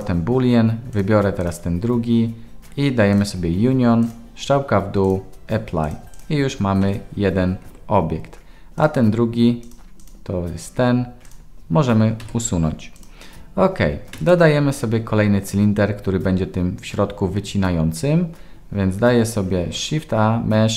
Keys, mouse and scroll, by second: 1.0 click, 3.1 click, 4.1-5.1 drag, 5.8 click, 6.8 g, 8.8 click, 9.6 click, 10.0 click, 12.2 Delete, 13.0 click, 14.1 KP_1, 19.7 shift+a.